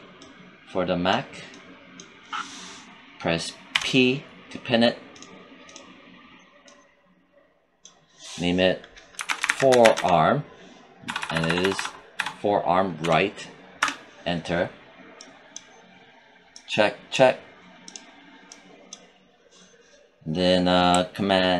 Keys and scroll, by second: 3.6 p, 9.0-9.8 typing, 11.0 Right, 12.9 BackSpace, 13.7 Return.